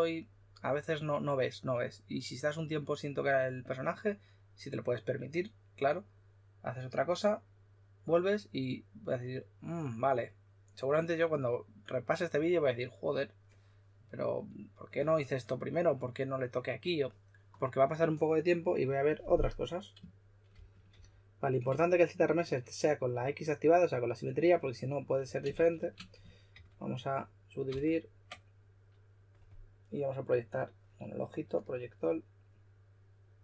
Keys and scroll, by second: 20.2-21.3 typing, 25.5 shift+f, 26.4 super+d, 27.6 super+d.